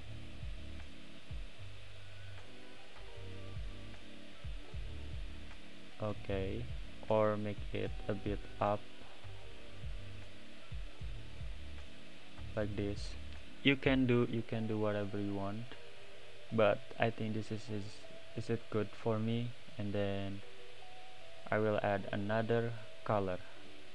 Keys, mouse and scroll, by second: 1.4 click, 2.9 click, 5.0 click, 7.5 click, 9.4 click, 12.8 click, 16.0 click, 21.5 click, 21.9-22.7 middle drag, 22.7 scroll up 3, 23.3 click, 23.5-23.9 middle drag.